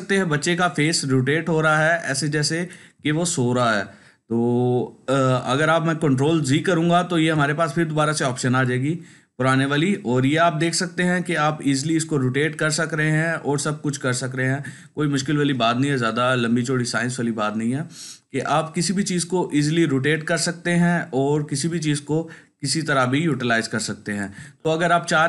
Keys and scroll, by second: 6.0 ctrl+z.